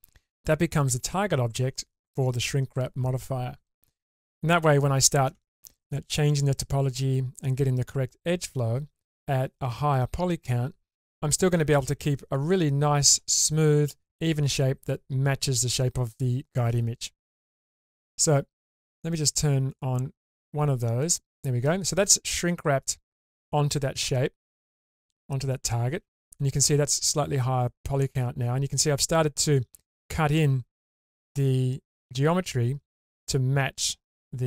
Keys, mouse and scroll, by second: 4.3 middle click, 5.6-5.9 shift+middle drag, 19.7 click, 21.0 click, 24.8-27.0 middle drag, 27.5-30.8 scroll up 4.